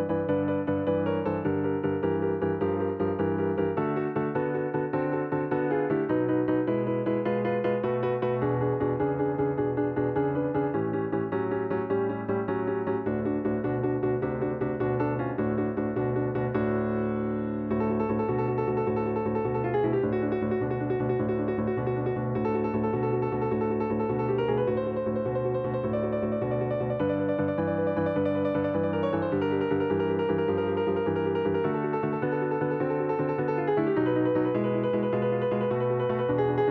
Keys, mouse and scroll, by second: 0.5-6.7 middle drag, 10.3-14.0 drag, 15.4 click, 18.8 click, 20.6 click, 21.9 click, 22.7 click, 24.1 click, 24.3 Tab, 25.2 click, 25.9-27.1 middle drag, 27.1 l, 28.0 click, 28.7-32.8 typing, 34.1 click, 36.3 click.